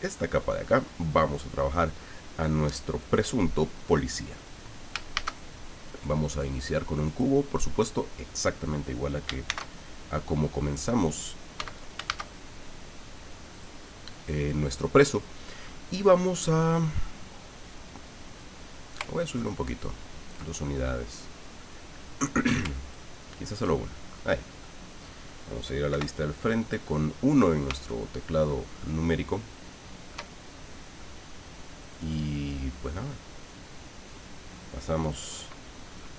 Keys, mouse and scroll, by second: 5.1 shift+a, 7.0 click, 9.4 shift+c, 10.1 scroll up 2, 11.5 x, 11.7 click, 12.1 shift+a, 13.5 click, 19.0-20.5 ctrl+drag, 20.5-20.9 ctrl+scroll down 2, 21.7 middle click, 22.9 ctrl+click, 23.8 ctrl+middle click, 25.0-25.3 scroll up 1, 25.9 KP_1, 26.8-27.1 scroll up 1, 27.3 scroll down 1, 28.1 shift+middle click, 28.8-30.3 shift+middle drag, 35.0 click.